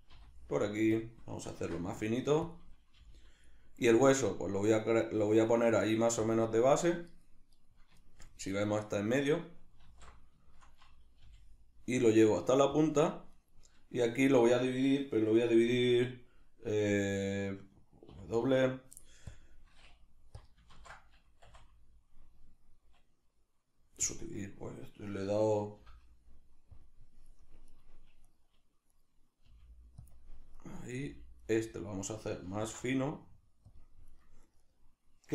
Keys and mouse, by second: 0.1 r, 1.0 click, 1.6 ctrl+alt+s, 2.6 click, 3.0 g, 6.4 click, 7.6 right click, 8.1-12.9 shift+middle drag, 9.8 alt+q, 11.2 g, 12.9 click, 13.3 right click, 15.5 2, 20.5 click, 20.8 ctrl+z, 21.5 w, 27.8 right click, 28.3 right click, 29.5 g, 30.1 click, 30.6 right click, 31.0 g, 32.6 ctrl+alt+s, 33.8 click, 34.1 right click, 34.5 right click, 34.6 right click.